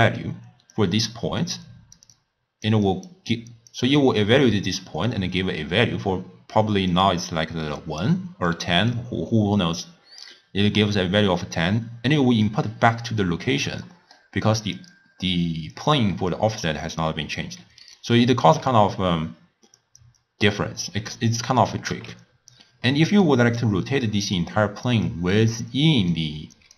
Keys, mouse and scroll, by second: 0.8-2.0 drag, 2.0-13.6 typing, 2.1 click, 2.9 click, 3.4 click, 6.9-7.8 drag, 8.5 click, 12.5 click, 12.9 click, 13.9-14.8 middle drag, 14.8 click, 16.3 click, 17.6 d, 17.9 right click, 18.5 d, 19.8 click, 20.2-22.2 drag, 22.2 x, 22.9 middle click, 23.6 click, 25.1 click, 26.1 click.